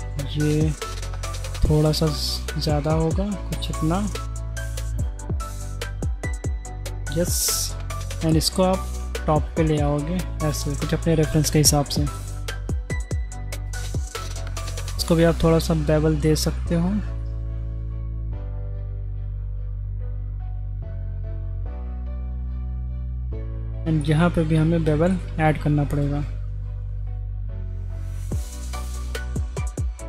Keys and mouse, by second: 1.8 ctrl+b, 6.4-7.5 middle drag, 7.9 click, 8.4 middle click, 8.9 g, 11.1 middle click, 12.1-14.6 middle drag, 15.6 ctrl+b, 21.7 g, 22.9-23.5 middle drag, 24.6 middle click, 26.0 ctrl+b.